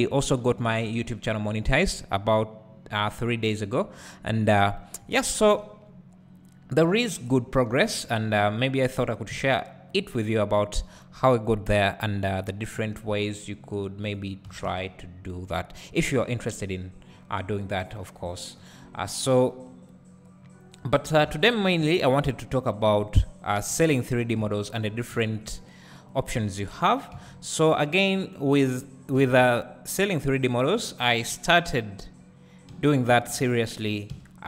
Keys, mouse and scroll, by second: 0.8 Tab, 2.9 i, 5.0 `, 6.0-8.2 scroll up 1, 8.2 e, 9.0 click, 9.3 z, 10.0 click, 10.9 `, 12.8 i, 14.1 click, 14.5 s, 16.0 click, 17.1 `, 17.8 1, 18.6 alt+click, 19.0 `, 21.2 2, 24.6 shift+click, 25.1 `, 26.3 e, 28.3 right click, 29.2 g, 30.9 click, 31.3 `, 32.7 1.